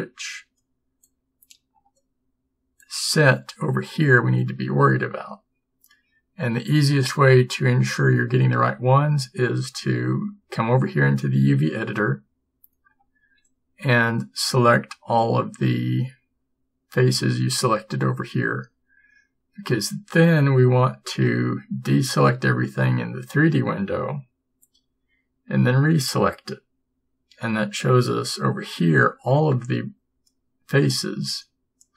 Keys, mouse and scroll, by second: 1.1 b, 2.9 b, 22.2 a, 25.9 a.